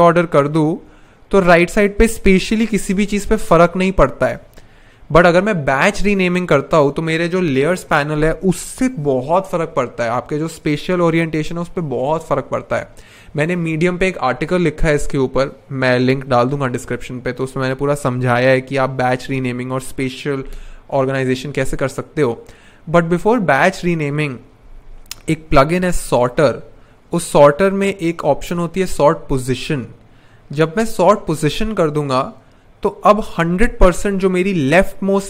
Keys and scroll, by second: 24.6 super+/, 25.1-26.2 typing.